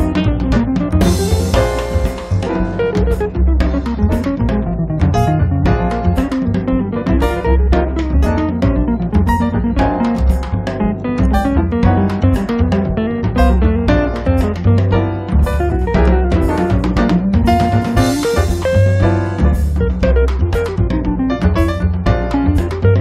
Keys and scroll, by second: 2.1 space, 14.5 space, 18.7 1.